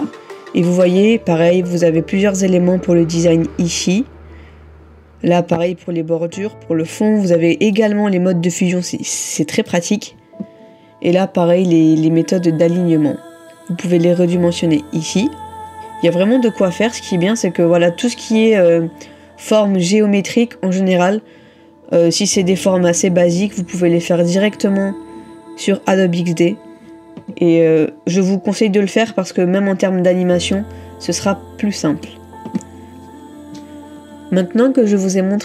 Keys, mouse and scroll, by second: 15.8-17.0 scroll down 1, 30.6 middle click.